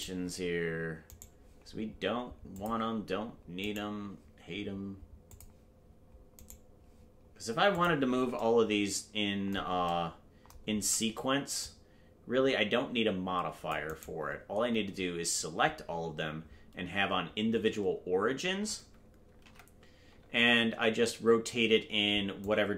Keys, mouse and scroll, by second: 1.4-2.1 right drag, 2.5-2.9 drag, 3.9 right click, 5.3 click, 6.7 right click, 7.7 click, 10.8 c, 14.4-14.9 scroll down 1, 19.5 alt+r, 22.4-22.7 drag.